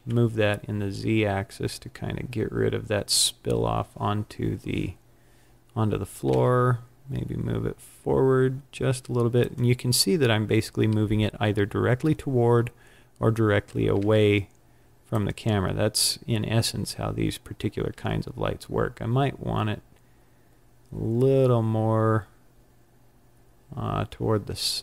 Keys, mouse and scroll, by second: 3.0 click, 6.3 g, 9.4 click, 12.6-13.9 scroll up 9, 13.9 g, 15.2 click, 17.9 g.